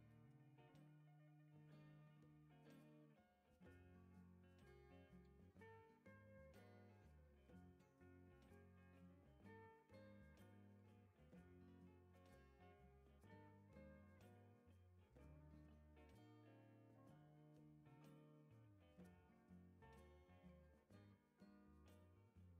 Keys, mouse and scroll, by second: 0.7 click, 4.3 click, 6.1 click, 6.9 click, 7.2 space, 8.3 click, 9.3 click, 10.6 click, 13.8 click, 15.9 click, 16.8 click, 17.2 space, 20.2 click.